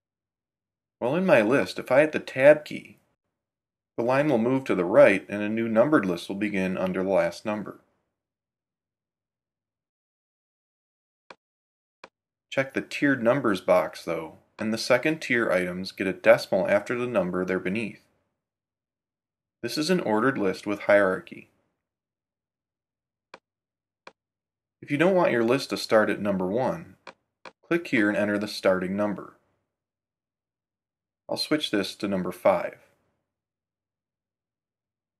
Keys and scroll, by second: 3.0 Tab, 7.6 Tab.